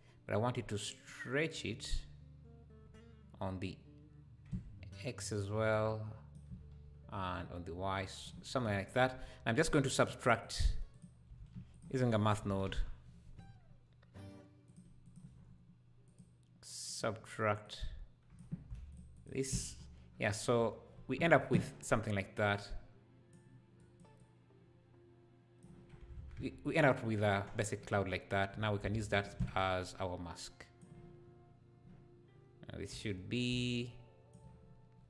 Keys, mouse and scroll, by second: 3.4-6.5 drag, 7.3-8.5 shift+drag, 8.5 scroll down 4, 9.7 click, 10.4 click, 10.9 click, 11.4 shift+a, 15.4 scroll up 2, 16.1-17.7 drag, 16.1 scroll up 1, 19.2 ctrl+shift+click, 19.8 scroll up 2, 20.6 scroll up 1, 22.6-25.9 drag, 25.9 scroll down 3, 26.2 alt+a, 27.4-27.8 scroll down 5, 28.1 scroll up 2, 29.1 ctrl+shift+click, 29.8 click, 32.8 click, 33.4 click.